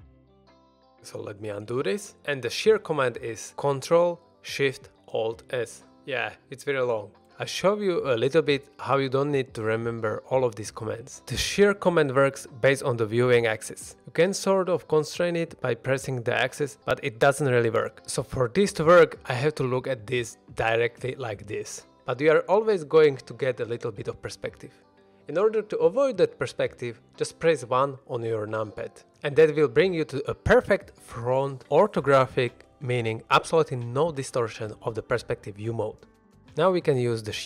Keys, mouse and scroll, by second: 1.1 ctrl+z, 5.3 ctrl+alt+shift+s, 14.2 y, 15.4 x, 17.0 right click, 19.5-20.3 middle drag, 20.4 shift+middle drag, 20.7 middle click, 22.6-23.6 middle drag, 24.9 middle click, 28.0 KP_1.